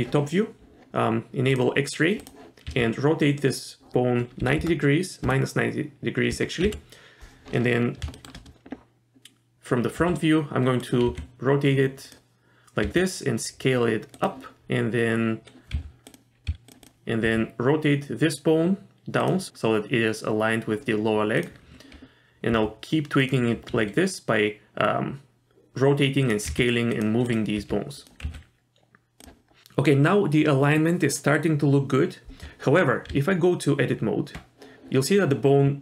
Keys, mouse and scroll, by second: 1.5 click, 2.2 click, 2.7 r, 6.6 KP_1, 7.7 scroll down 2, 8.1 shift+middle click, 10.0 r, 11.1 g, 12.8 s, 15.7 s, 16.5 s, 16.8 click, 17.2 r, 21.4 click, 22.5 r, 23.7 s, 26.5 g, 27.3 click, 27.6 r, 28.2 s, 33.1 Tab.